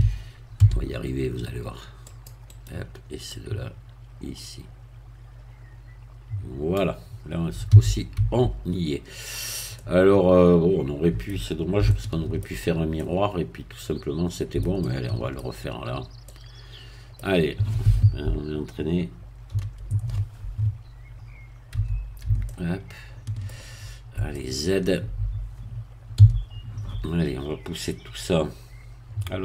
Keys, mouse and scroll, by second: 0.5 c, 2.1 click, 2.5 right click, 3.3-6.9 drag, 7.7 z, 8.2 Tab, 8.7-9.4 scroll down 2, 9.7-11.7 middle drag, 11.9 shift+middle click, 12.9-14.8 middle drag, 15.8 shift+scroll up 1, 16.3-18.2 middle drag, 19.5 ctrl+3, 20.7-21.7 scroll up 2, 21.7 scroll up 1, 21.7 Tab, 22.4-23.8 shift+middle drag, 23.8 shift+scroll up 2, 24.3 shift+middle click, 26.1 z.